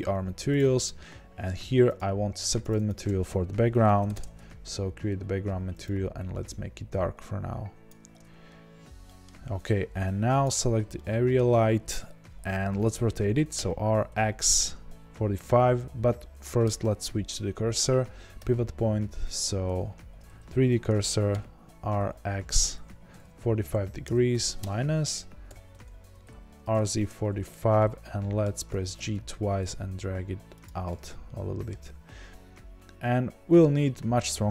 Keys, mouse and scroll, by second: 0.0-0.5 scroll down 2, 0.5 click, 4.1-6.2 drag, 4.1 g, 4.2 Return, 9.0-10.4 middle drag, 10.4 click, 10.9-13.5 middle drag, 13.5 r, 19.6 ., 21.3 r, 24.7 KP_Enter, 25.5 r, 27.0 KP_Enter, 27.7 middle click, 28.7 g, 30.6 click, 30.8 middle click, 31.4-34.5 middle drag.